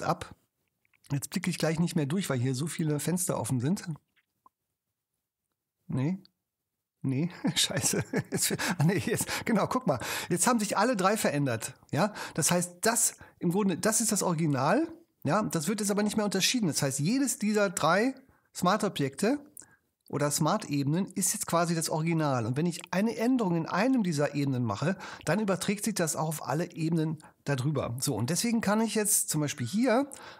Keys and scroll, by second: 27.7 shift+BackSpace.